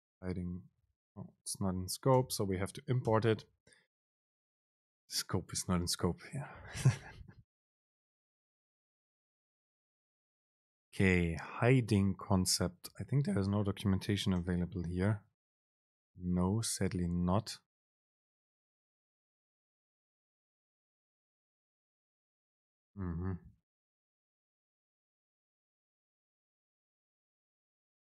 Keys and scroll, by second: 1.3 ctrl+r, 6.8 super+p, 14.7 super+b, 24.8 alt+super+[, 25.7 Right, 27.9 super+p.